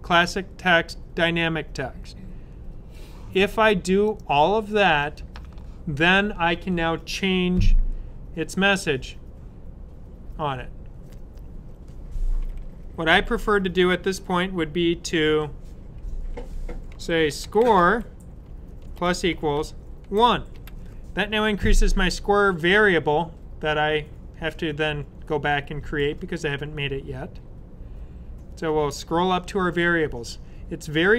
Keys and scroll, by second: 16.8-17.7 typing, 18.8-20.4 typing.